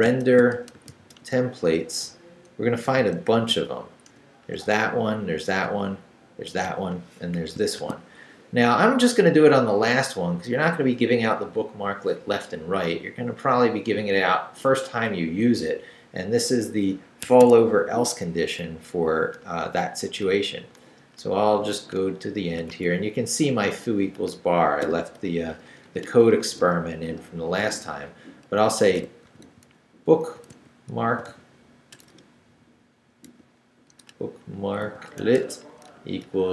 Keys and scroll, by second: 0.0-4.7 typing, 4.1 Return, 7.6 shift+n, 17.3 Escape, 17.9 Right, 22.7 Right, 24.8 i, 25.2 BackSpace, 28.3-31.9 typing, 33.3-36.5 typing.